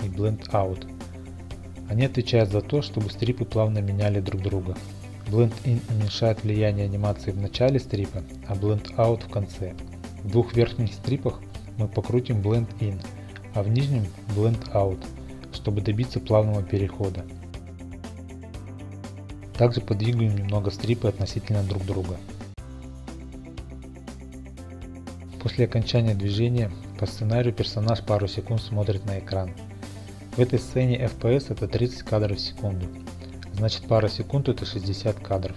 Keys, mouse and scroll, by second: 0.3 click, 3.4 click, 5.2 middle click, 5.3 middle click, 13.8 click, 14.0 click, 14.9 click, 15.1 click, 16.8-17.4 scroll, 17.4 click, 17.5 shift+click, 17.8 g, 18.0 click, 18.4 click, 18.7 click, 18.8 click, 18.9 scroll, 19.1 g, 19.2 click, 21.4 click, 21.6 g, 21.8 click, 22.0 click, 23.0 click, 23.1 g, 23.3 click, 24.1-24.4 scroll, 25.4 click, 27.9 click, 31.6 n, 33.2-34.0 scroll, 34.8 shift+middle click.